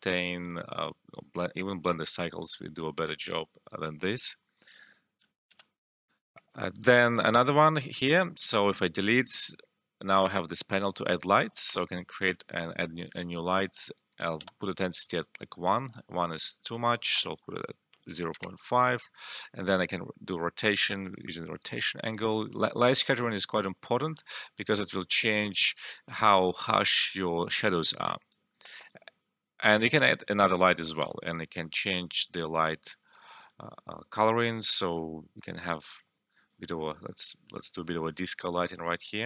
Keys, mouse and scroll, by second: 4.6 click, 5.5 0, 5.6 Return, 8.5 click, 11.6 click, 13.8 click, 14.3 1, 14.6 Return, 15.8 click, 17.4 5, 18.3 Return, 19.8-33.3 drag, 35.7-39.2 drag.